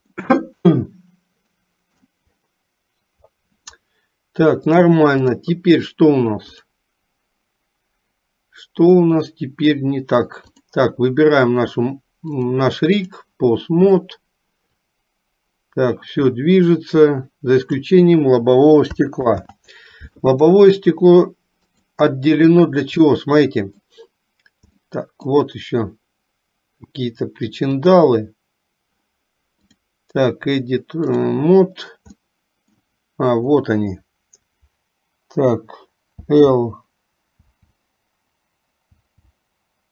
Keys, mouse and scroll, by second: 0.5-2.3 middle drag, 4.8 click, 6.6 click, 9.0 middle click, 10.5 click, 12.5 click, 15.0-18.2 drag, 19.4 ctrl+z, 21.8 click, 23.2 middle click, 24.9 middle click, 27.9 click, 29.6-31.5 drag, 32.5 middle click, 36.4 l, 37.8 l.